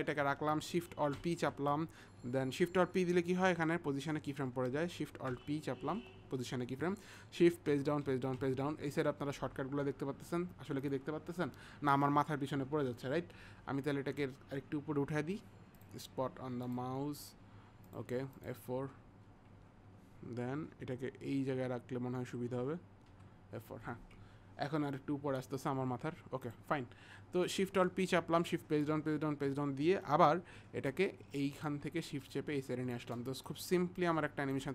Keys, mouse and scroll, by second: 1.2 ctrl+alt+p, 8.1 shift+Page_Down, 10.9 click, 15.8 click, 16.7 click, 18.9 click, 23.2 F4, 31.9 click, 33.4 click.